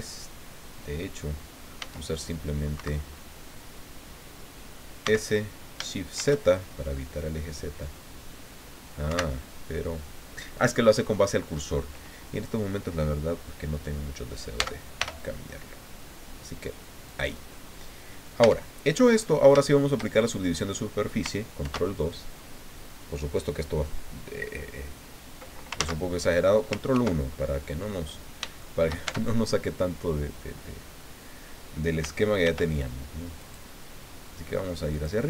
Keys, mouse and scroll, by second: 1.8 s, 2.7 Escape, 5.0 s, 6.1 shift+z, 9.1 Escape, 14.5 s, 15.0 y, 17.1 click, 17.6 middle click, 18.4 Tab, 19.1 middle click, 20.2-20.5 shift+scroll up 3, 20.6-20.9 scroll down 2, 21.6 ctrl+2, 25.8 ctrl+z, 26.9 ctrl+1, 28.0-29.0 drag, 29.0 shift+Tab, 32.4 ctrl+r, 33.4 click, 34.9 click.